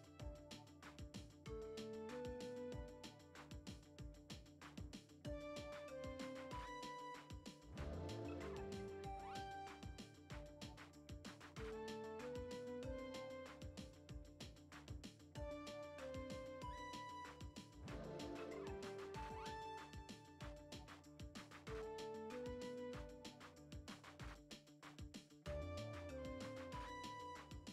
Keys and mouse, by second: 1.3 middle click, 1.8-2.3 drag, 2.6-3.2 drag, 3.4 shift+a, 7.2 F5, 7.2 n, 7.3 F6, 7.5 middle click, 8.2 a, 8.8 y, 9.3 u, 11.7 a, 12.1 r, 14.3 F5, 14.3 n, 14.7 F6, 15.1 middle click, 15.5-16.3 middle drag, 16.3 click, 17.2-18.3 drag, 20.2 Tab, 20.5 middle click, 21.2 click, 21.8 ctrl+Tab, 22.4 shift+middle click, 24.2 click.